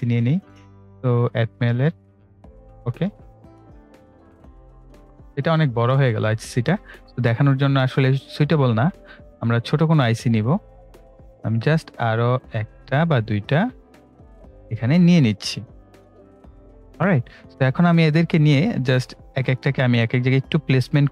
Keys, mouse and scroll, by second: 1.2-6.2 drag, 7.0 Delete, 8.0 click, 8.6 Delete, 9.9-17.3 drag, 17.3-17.8 ctrl+scroll down 1, 18.6 ctrl+scroll up 1, 19.2-21.1 drag.